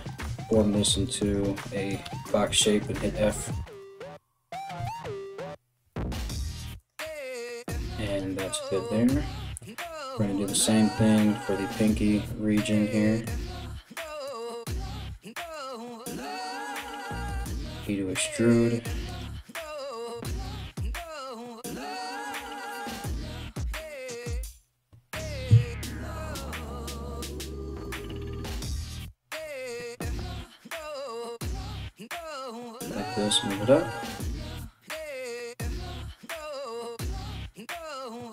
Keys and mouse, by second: 0.4 right click, 0.8 shift+right click, 1.7 f, 3.3-6.5 right drag, 3.7 f, 4.5 ctrl+z, 5.5 g, 6.7 g, 7.3 right click, 7.4 middle click, 7.4 g, 8.2 right click, 8.3-10.5 middle drag, 10.5-18.0 ctrl+drag, 13.9 middle click, 13.9 right click, 15.2 ctrl+middle click, 15.2 ctrl+right click, 15.9 ctrl+middle click, 15.9 ctrl+right click, 17.0 e, 18.0 middle click, 18.7 right click, 18.8 middle click, 19.1 right click, 19.2 middle click, 19.4 right click, 19.5 shift+middle click, 20.1 shift+right click, 20.2-21.8 shift+middle drag, 20.7 f, 21.8 right click, 21.9-38.3 shift+middle drag, 22.1 right click, 22.8 f, 24.0 right click, 26.0 ctrl+right click, 26.8 alt+q, 28.4 g, 31.4 3, 31.6 right click, 32.3 g, 34.9 right click, 35.5 1, 35.6-37.1 right drag, 37.5 right click, 38.2 alt+q.